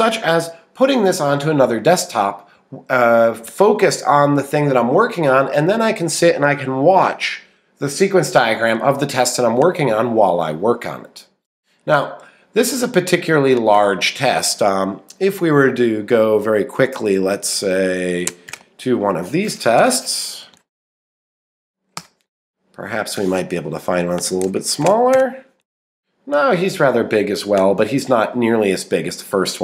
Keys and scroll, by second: 18.3 Up, 20.3 Right, 21.6 Up, 22.0 Return.